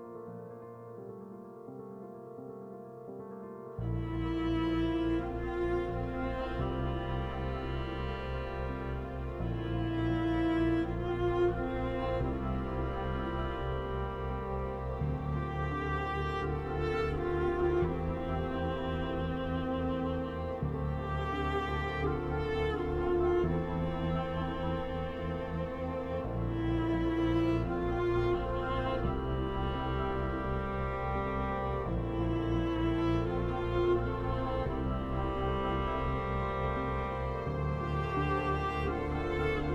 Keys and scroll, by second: 3.3 Left, 4.1 Right, 4.4 Left, 6.2 ctrl+t, 6.5 scroll, 6.6 Left, 7.4 Left, 8.2 scroll, 8.5 Left, 8.5 typing, 10.9 Left, 10.9 typing, 13.0 Delete, 13.5 ctrl+d, 13.8 Left, 16.1-17.0 typing, 16.9 Right, 17.3 Left, 17.8 Right, 18.2 Left, 18.2 typing, 19.2 Left, 19.8-20.2 typing, 20.0 scroll, 20.4 Left, 21.8 Left, 24.4 scroll, 25.0 Left, 25.9 Delete, 26.4 d, 26.8 Left, 27.0 scroll, 27.6 Left, 29.6 Left, 30.4 Left, 33.2 Right, 33.5 Left, 34.0 t, 34.7 Left, 36.4 scroll, 36.6 Left, 39.6 Left.